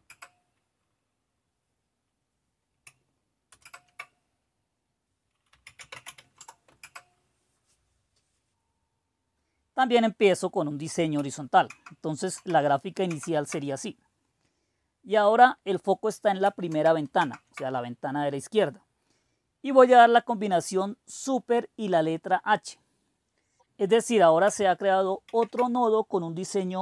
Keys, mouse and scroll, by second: 0.0 Return, 3.5 super+Return, 5.3-6.4 typing, 6.7 Return, 8.5-11.5 drag, 11.6 super+Left, 12.2 super+Right, 13.0 super+Left, 16.6 super+Right, 17.1 super+Left, 25.2 super+h.